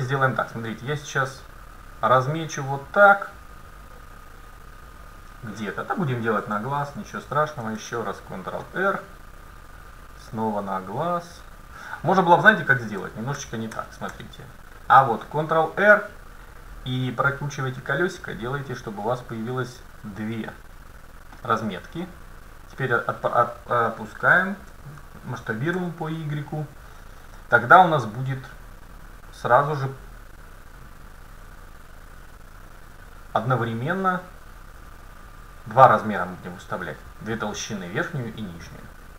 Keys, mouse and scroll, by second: 6.5 a, 7.7 ctrl+r, 13.1 ctrl+z, 13.4 ctrl+z, 13.8 ctrl+z, 14.2 ctrl+z, 15.3 ctrl+r, 24.7 s.